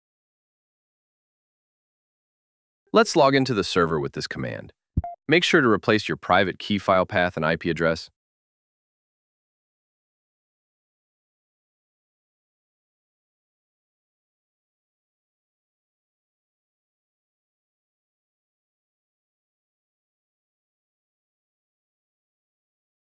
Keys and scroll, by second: 0.5 shift+d, 9.5 shift+@, 16.3 super+c, 16.9 super+Tab, 18.3 super+v, 19.5 Left, 21.9 BackSpace.